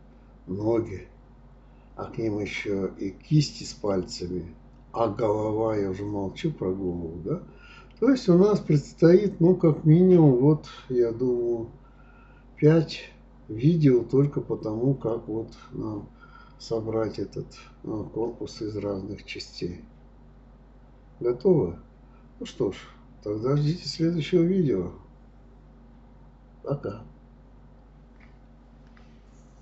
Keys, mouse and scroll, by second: 2.2 click, 2.5 middle click, 3.0-4.2 scroll up 3, 4.2 click, 4.7 scroll down 1, 5.0-5.8 scroll up 1, 5.8 click, 6.1 click, 6.9-8.3 drag, 8.4-9.9 middle drag, 10.1 click, 11.1 g, 12.4 click, 13.0 g, 14.5 click, 14.8 g, 15.6 click, 15.8 g, 16.6-18.2 middle drag, 20.8-22.3 middle drag, 24.1 scroll down 2, 24.3-25.8 middle drag, 25.8-26.2 scroll up 2, 26.2 scroll down 2, 26.4 shift+middle click, 27.1-27.5 scroll up 2, 27.5-29.0 shift+middle drag.